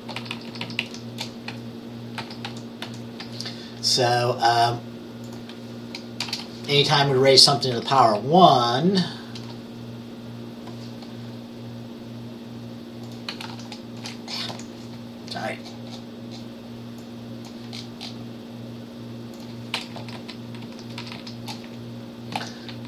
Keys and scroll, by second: 0.3 shift+Down, 0.4 shift+Down, 0.6 shift+Down, 0.7 shift+Down, 2.3 ctrl+c, 2.5 ctrl+v, 2.9 ctrl+v, 6.3 BackSpace, 6.4 1, 7.8 Up, 13.5 ctrl+a, 14.6 Left, 20.1 Left, 20.2 Left, 20.7 Down, 21.2 shift+Down, 22.4 ctrl+x.